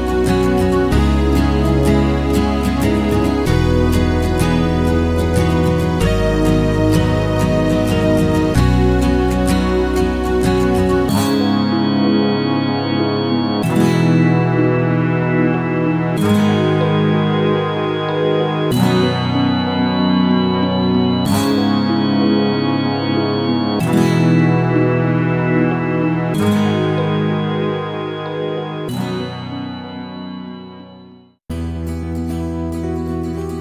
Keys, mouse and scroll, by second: 5.7 alt+right click, 5.9 alt+click, 6.3 alt+middle click, 6.4 alt+click, 6.6 alt+middle click, 6.8 alt+click, 6.9 alt+right click, 7.1 alt+middle click, 7.2 alt+click, 7.5 g, 7.7-8.9 alt+drag, 8.9-11.7 typing, 9.3 alt+right click, 9.4 alt+click, 9.6 alt+click, 10.3 click, 11.4 click, 11.8-13.9 alt+drag, 13.9 alt+right click, 14.0 alt+middle click, 14.2 alt+click, 14.4 alt+middle click, 14.8 alt+click, 15.0 alt+right click, 15.1 alt+middle click, 16.0 click, 16.3 f, 17.0 click, 17.2 f, 17.7 click, 18.0 alt+right click, 18.1 ctrl+z, 18.4 click, 18.8 ctrl+z, 19.7 ctrl+click, 20.3 ctrl+z, 23.8 ctrl+click, 24.3 ctrl+z, 24.9 right click, 25.5 ctrl+click, 25.9 ctrl+z, 26.1 alt+middle click, 26.5 f, 26.7 ctrl+click, 26.9 ctrl+z, 27.0 f, 28.2 ctrl+click, 28.5 ctrl+z, 28.9 right click, 29.6 ctrl+click, 29.9 ctrl+z, 30.4 ctrl+alt+click, 30.9 ctrl+z, 31.2 f, 31.4 ctrl+click, 31.6 ctrl+z, 31.8 f, 32.3 ctrl+click, 32.6 ctrl+z.